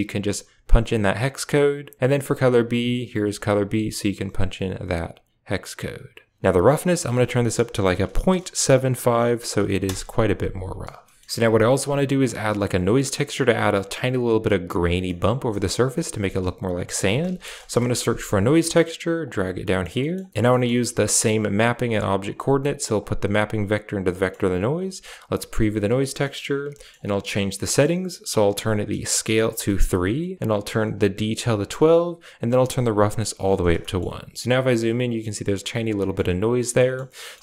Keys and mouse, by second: 2.6 click, 6.8-9.8 drag, 11.0 shift+middle click, 15.0 middle click, 15.4 middle click, 16.0 shift+a, 19.5 middle click, 19.9 middle click, 20.4 middle click, 21.2 click, 22.9-23.8 drag, 24.0 middle click, 24.5 click, 25.0 ctrl+shift+click, 27.6 middle click, 28.6-29.3 drag, 29.5 middle click, 30.7-31.5 drag, 32.8 click, 33.8 shift+middle click, 35.9 shift+middle click, 36.7 middle click, 37.1 middle click.